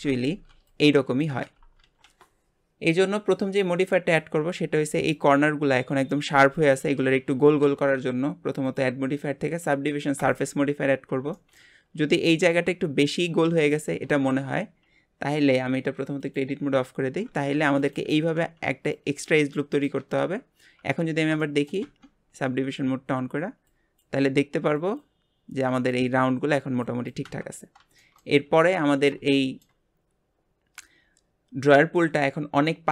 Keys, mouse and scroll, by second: 8.6-11.3 drag, 11.3 shift+middle click, 11.8-13.5 scroll up 1, 14.6 Tab, 14.9 scroll down 1, 16.2 click, 17.5 ctrl+r, 20.4 scroll up 1, 21.4 scroll up 1, 21.4 shift+middle click, 21.8 Tab, 27.5 scroll down 1, 28.0-32.9 shift+middle drag.